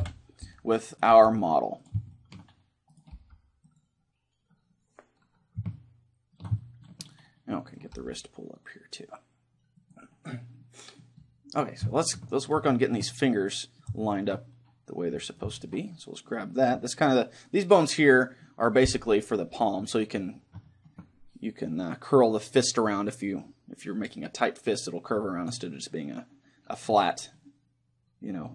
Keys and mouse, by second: 0.1 KP_1, 0.5 middle click, 0.9 right click, 1.1 g, 1.9-3.7 drag, 2.2-4.8 right drag, 3.1 g, 3.8-5.5 drag, 5.7-8.5 middle drag, 7.7-9.5 right drag, 8.0 g, 9.9-11.5 drag, 10.6 middle click, 12.6-17.5 middle drag, 15.3-17.0 right drag, 18.5-22.3 middle drag.